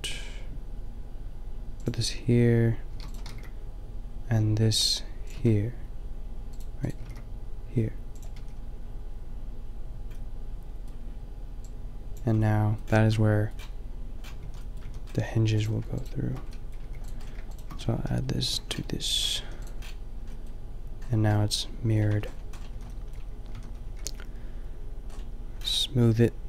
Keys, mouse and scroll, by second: 2.0 shift+click, 2.9 shift+d, 3.3 g, 5.3 a, 7.0 g, 8.3 a, 12.5-13.3 middle drag, 14.4 a, 14.8 a, 16.7-17.6 drag, 16.8 g, 18.4 ctrl+j, 19.4 a, 22.1 Tab, 22.7 a, 23.5 a, 23.9 t.